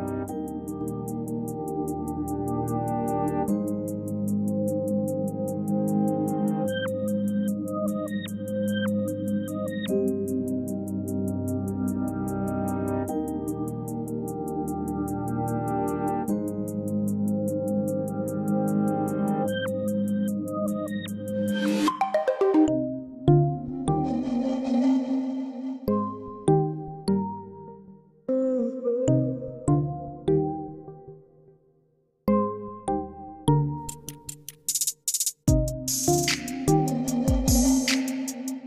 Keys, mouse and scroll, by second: 0.0 click, 3.0 scroll down 2, 3.0 click, 9.8-12.5 middle drag, 13.9-20.7 drag, 25.3 middle click, 25.4-25.9 scroll down 2, 25.9-28.0 middle drag, 28.0 g, 29.8 shift+a, 31.7 Down, 34.1 click, 34.6-37.6 drag, 37.6 shift+a.